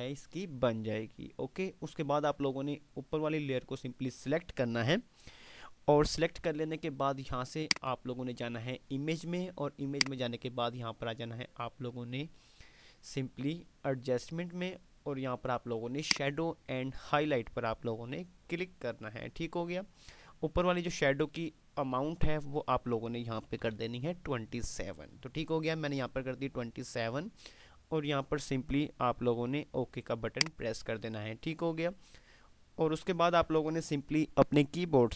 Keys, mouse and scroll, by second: 7.6 click, 10.1 click, 16.1 click, 30.5 click.